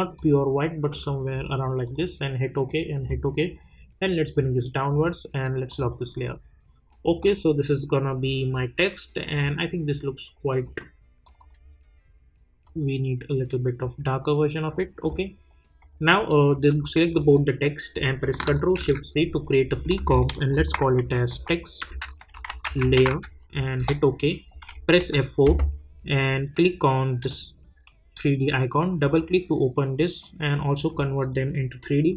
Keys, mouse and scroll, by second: 9.2-15.0 drag, 17.0 shift+click, 18.7 ctrl+shift+c, 20.1-23.5 typing, 23.8 Return, 25.0 F4, 27.2-32.1 drag.